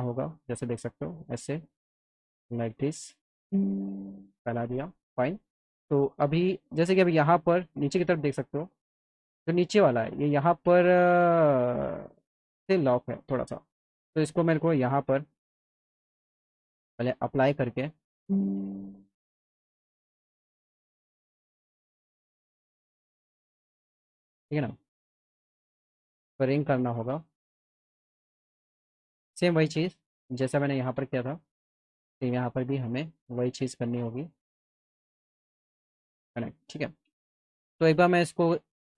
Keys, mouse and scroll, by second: 2.6-4.7 drag, 5.3 alt+middle click, 6.1 middle click, 15.0 click, 16.2 ctrl+z, 17.6 click, 25.0 click, 26.8 click, 27.7 alt+middle click, 29.7-31.3 alt+drag, 36.0 click, 36.7 middle click, 37.2 alt+middle click, 38.4 click.